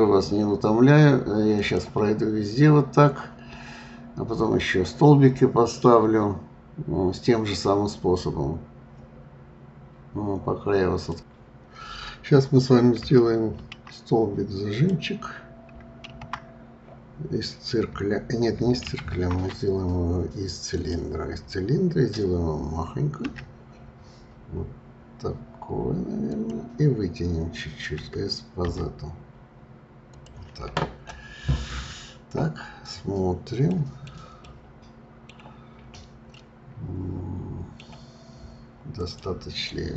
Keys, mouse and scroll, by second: 2.2 scroll down 2, 14.7 click, 16.0 shift+a, 18.8 shift+a, 33.7-35.7 middle drag, 35.7-36.3 scroll up 2, 36.3-38.9 middle drag, 38.9 click.